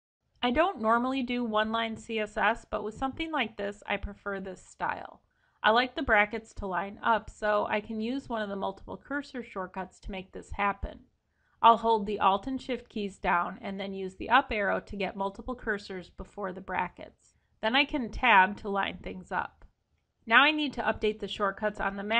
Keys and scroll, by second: 13.0 alt+shift+Up, 19.6 Escape, 21.7 Escape.